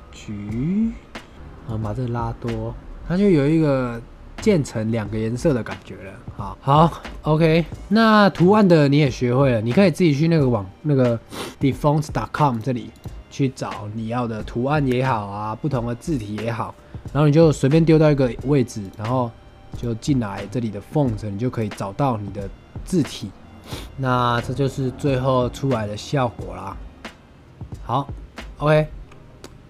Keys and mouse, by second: 1.6-2.9 drag, 3.8-4.4 middle drag, 6.8 shift+middle drag, 7.6 shift+middle click, 7.8 middle click, 18.7 click, 21.5 click, 24.0-25.2 middle drag, 25.9-26.9 drag, 25.9-26.9 right drag, 26.9-28.0 middle drag, 28.7 click, 28.7 right click.